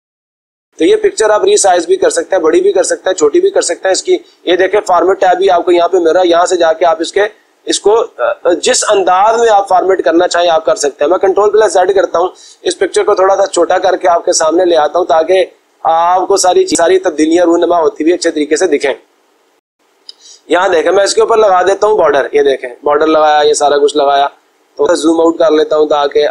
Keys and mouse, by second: 5.2-7.6 drag, 11.0 ctrl+z, 18.7-20.0 drag, 26.2-26.3 drag.